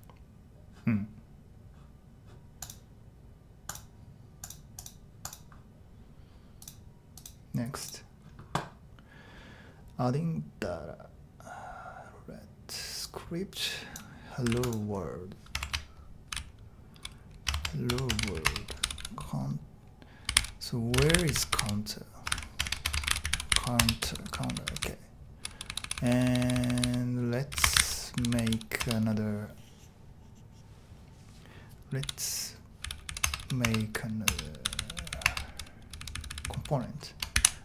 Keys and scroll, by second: 14.5 super+c, 15.6 shift+Home, 16.0-19.0 typing, 17.5 shift+Tab, 20.0-25.7 typing, 22.3 ctrl+w, 27.3-28.8 typing, 32.0-37.3 typing, 34.2 Return.